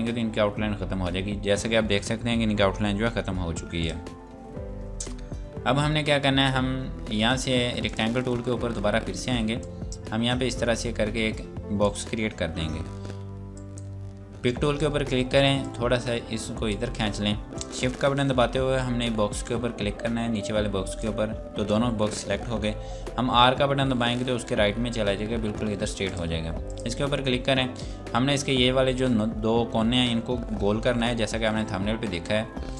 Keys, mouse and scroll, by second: 3.8 click, 4.3 scroll down 1, 7.9 click, 20.9 click, 24.0 r, 26.1 click.